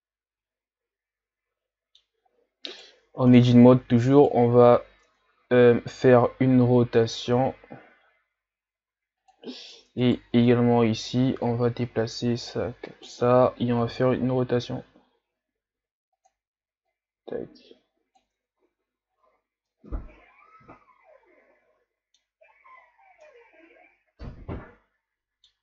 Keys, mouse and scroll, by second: 2.3-2.7 scroll up 4, 2.7 right click, 3.2 ctrl+scroll up 3, 4.2 right click, 5.1 Tab, 5.9-6.3 scroll up 1, 7.3 r, 9.8 Tab, 10.0 right click, 10.3 Tab, 11.5-13.8 drag, 13.8 r, 16.9-18.4 drag, 18.4 Tab, 18.8 a, 19.1-19.7 scroll down 6, 19.7-22.7 middle drag, 22.8-23.3 scroll down 1, 23.3-25.6 middle drag.